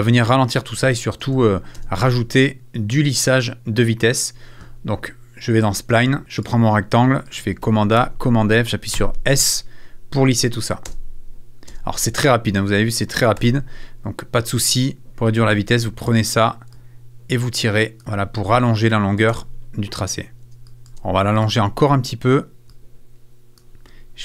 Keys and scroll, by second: 1.2 space, 8.0 super+f, 9.0 s, 10.8 space, 13.4 super+f, 15.1 shift+super+z, 19.3 space.